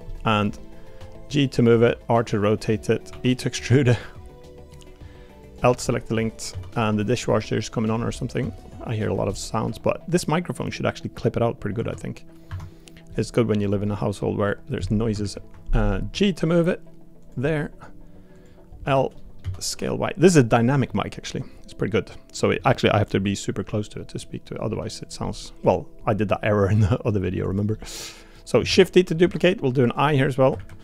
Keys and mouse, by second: 0.1 middle click, 1.0 g, 1.8 r, 3.1 e, 5.6 l, 5.9 middle click, 6.5 s, 8.1 middle click, 8.4 s, 9.3-10.6 middle drag, 9.6 g, 11.7 s, 13.1 middle click, 13.6 click, 13.8 middle click, 14.5 middle click, 16.1 g, 17.4 middle click, 18.8 l, 19.1 middle click, 20.8 middle click, 21.8 middle click, 23.7 middle click, 24.2 middle click, 24.7 g, 25.2 middle click, 25.6 click, 27.0 middle click, 27.4 click, 27.7 middle click, 28.3 middle click, 28.6 shift+d, 29.2 s.